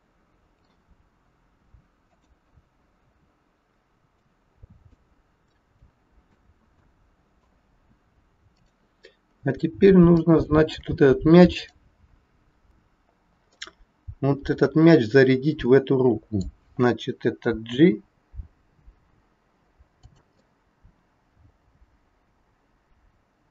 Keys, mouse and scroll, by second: 2.1 click, 3.0 KP_3, 4.1 middle click, 5.2 scroll up 3, 8.5 click, 9.1 scroll up 2, 9.7 scroll up 1, 10.2 shift+middle click, 11.5 click, 13.6 middle click, 17.6 g, 20.5 middle click.